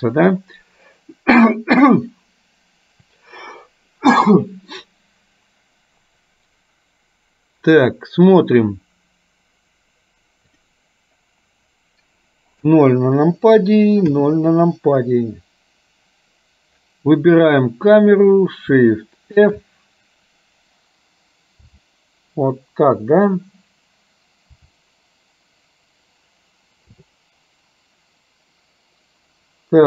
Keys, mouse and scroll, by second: 10.6 click, 12.6 KP_0, 18.0 click, 19.5 shift+f.